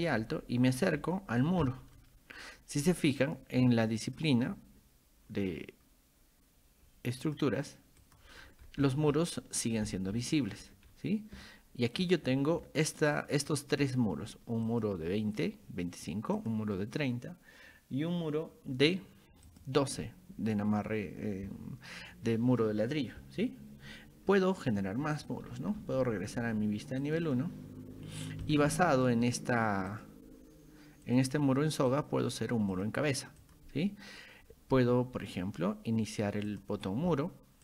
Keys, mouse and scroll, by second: 0.0 middle click, 0.0-0.4 scroll up 4, 1.0 shift+middle click, 1.7 middle click, 4.1 click, 7.2 click, 8.0 click, 8.4 scroll down 2, 8.9 shift+middle click, 9.9 shift+middle click, 10.9 scroll up 1, 11.4-13.2 shift+middle drag, 14.7 click, 16.4 click, 19.5 click, 25.5-26.6 scroll up 7, 27.0 click, 27.3 click, 28.0 scroll down 2, 28.5 click, 28.7-29.1 scroll up 2, 29.9 click, 31.1 click, 31.9 click, 32.7 click, 33.4 click, 36.5 click.